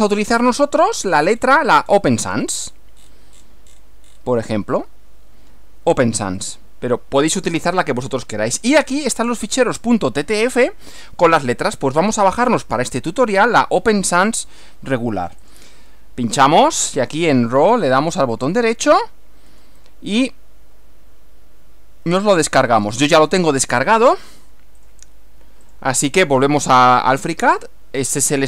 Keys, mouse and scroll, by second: 6.5 click, 8.6-9.1 scroll down 1, 15.5 click, 18.4-19.8 right drag, 22.8 click, 24.8 click, 25.7 click.